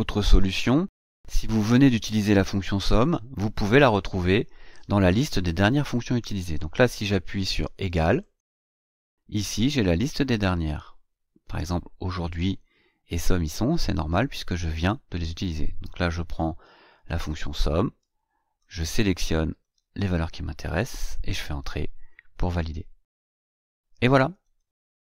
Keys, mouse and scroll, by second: 0.4 click, 3.0 Delete, 8.2 click, 10.2 click, 16.4 click, 18.5-19.7 drag, 20.8 Return.